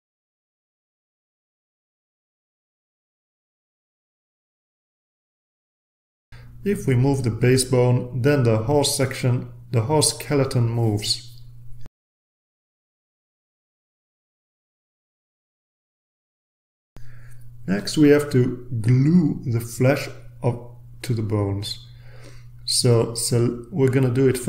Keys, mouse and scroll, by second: 1.6-2.6 drag, 3.0-4.1 drag, 4.6 ctrl+z, 5.7 ctrl+z, 8.0-9.0 drag, 9.5-10.4 drag, 11.4-12.5 drag, 13.9-17.1 drag, 18.0 ctrl+z, 18.7 ctrl+z, 19.7 ctrl+z, 23.3-23.9 scroll up 2, 23.9-24.4 scroll up 1.